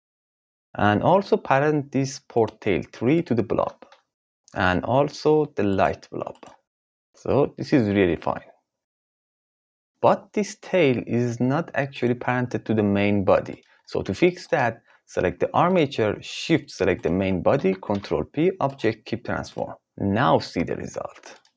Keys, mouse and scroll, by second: 2.1 click, 3.8 ctrl+p, 4.4 ctrl+z, 4.7 click, 5.5 shift+click, 6.3 ctrl+p, 7.6 g, 9.9 ctrl+z, 12.3 g, 16.9 shift+click, 17.9 ctrl+p, 19.4 click, 20.1 g.